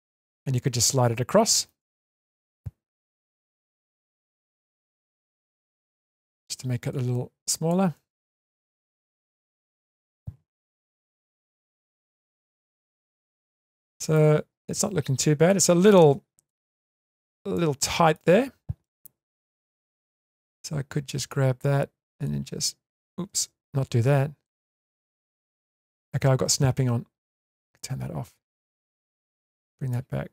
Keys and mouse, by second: 0.1-1.6 middle drag, 3.1-4.9 drag, 5.4 shift+middle click, 6.9 click, 7.9 middle click, 9.2 Tab, 9.7 middle click, 10.8 alt+z, 12.0-14.1 middle drag, 15.5 shift+middle click, 16.8 Tab, 17.5-18.1 shift+middle drag, 19.5 alt+z, 20.4 click, 22.3 click, 23.4 ctrl+z, 24.4 click, 24.6-26.0 drag, 26.3 ctrl+z, 27.3 click, 28.2 click, 28.4-29.9 drag, 30.2 Tab.